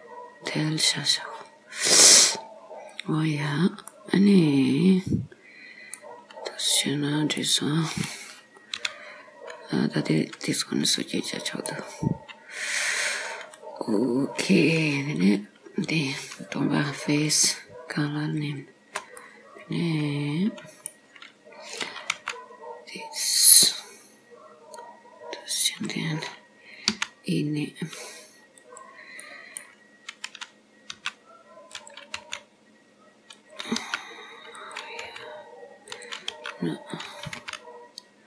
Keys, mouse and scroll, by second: 1.2 scroll up 3, 2.3-3.0 scroll up 3, 3.0 click, 3.8 scroll up 1, 4.0 middle click, 6.7 click, 7.4 middle click, 8.8 o, 10.3 click, 11.0 middle click, 12.6 click, 15.3 click, 17.3 click, 18.5 shift+click, 19.3 middle click, 22.2 g, 26.9 e, 29.3 middle click, 31.0 r, 32.2 g, 33.9 r, 35.1 g, 36.4 r, 37.5 g.